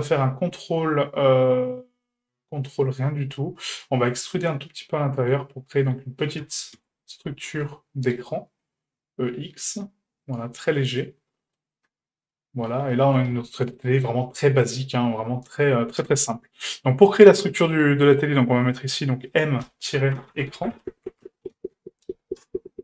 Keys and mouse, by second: 4.1 middle click, 5.0 middle click, 5.9 middle click, 6.4 e, 11.0 middle click, 11.9 Tab, 12.3-12.7 middle drag, 12.9 shift+middle click, 13.3 a, 14.6 right click, 15.2 Tab, 17.7 click, 18.8-22.8 drag.